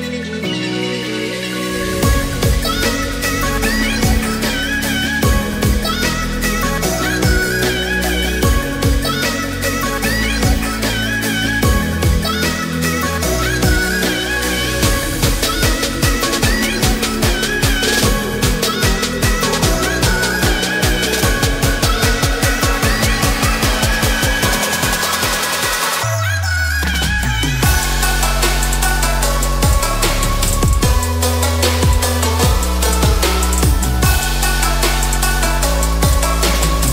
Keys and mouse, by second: 0.4 ctrl+r, 2.9 middle click, 3.5 middle click, 4.4 click, 4.7 alt+click, 5.1-5.7 middle drag, 6.8 s, 6.9 x, 8.1 click, 8.6 click, 8.9 alt+click, 9.8 s, 10.0 x, 10.8 click, 11.0 middle click, 13.6 shift+middle click, 15.0 s, 15.2 x, 16.8 middle click, 17.7 shift+middle click, 18.4 shift+middle click, 19.9 click, 20.9 typing, 21.4 click, 23.0 ctrl+b, 26.7 shift+middle drag, 27.0-27.6 middle drag, 28.1 middle click, 29.0 Tab, 29.3-29.9 middle drag, 30.3-30.7 shift+middle drag, 30.9 middle click, 31.2 Tab, 31.5 middle drag, 32.5 drag, 33.1 3, 33.4-33.7 drag, 33.7 middle click, 34.3 g, 34.4 z, 35.5 click, 35.9 middle click, 36.7 2.